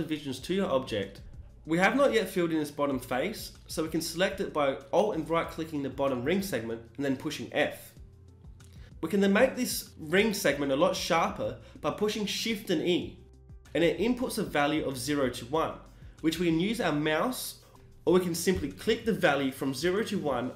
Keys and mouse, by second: 0.4 s, 2.2-4.0 drag, 4.0-7.3 right drag, 7.3 f, 10.0 shift+e.